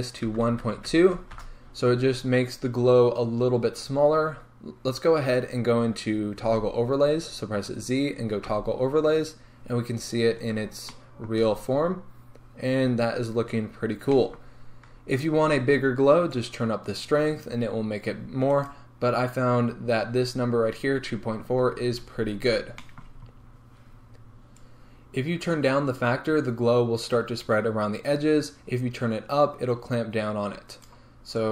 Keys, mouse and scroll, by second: 1.4-10.9 drag, 1.6 Return, 8.5 z, 10.9-16.5 shift+middle drag, 16.5-18.8 drag, 18.8 right click, 25.3-31.0 drag.